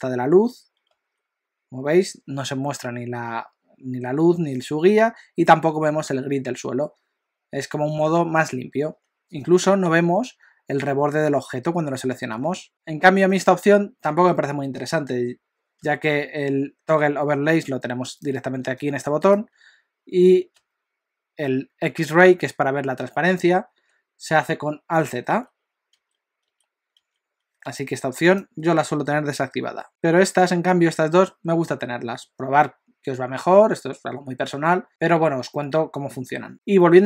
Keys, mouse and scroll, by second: 0.9 z, 9.4 click, 12.4 z, 12.7 z, 13.1 z, 15.8 z, 18.2 click, 18.7 click, 20.6 z, 25.3 alt+z, 26.0 alt+z, 27.0 alt+z, 27.7 F4.